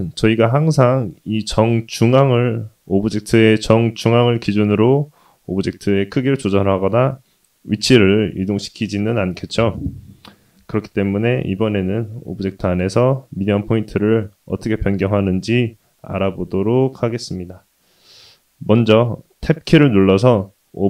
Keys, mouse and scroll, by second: 5.3-8.6 middle drag, 19.7 Tab.